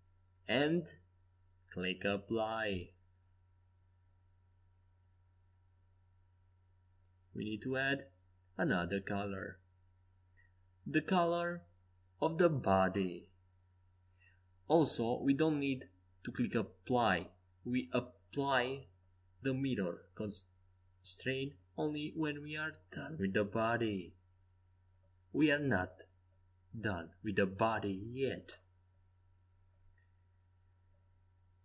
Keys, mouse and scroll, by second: 2.5-4.5 middle drag, 4.7-6.6 right drag, 6.1-11.9 drag, 14.6 z, 16.4-19.4 right drag, 19.7 Escape, 19.7-20.8 right drag, 21.1 z, 21.5 right click, 24.9 Tab, 25.3 z, 28.9-31.6 middle drag.